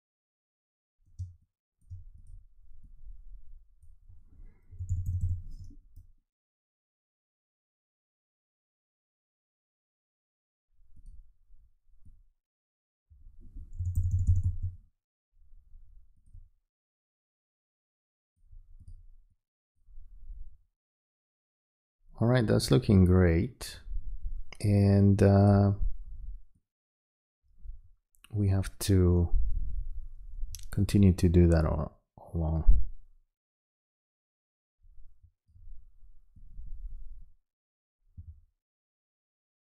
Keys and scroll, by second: 1.2 space, 4.7 alt+], 13.8 [.